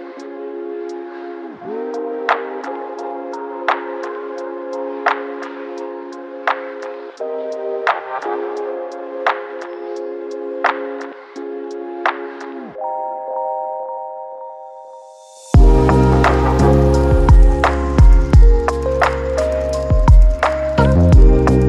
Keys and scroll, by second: 0.0-0.5 typing, 5.8 Return, 11.3 Return, 13.4 4, 19.9 space, 21.5 space.